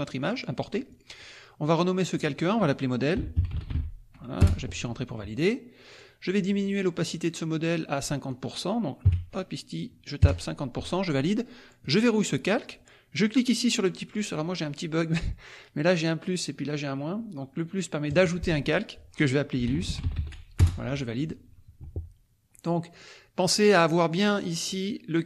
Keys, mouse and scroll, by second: 0.2-1.2 drag, 2.0 click, 2.9-4.2 typing, 4.4 Return, 5.9-7.3 drag, 8.3 click, 10.2 KP_Enter, 11.8 click, 18.1 click, 19.3-20.7 typing, 22.9 click, 23.4 click.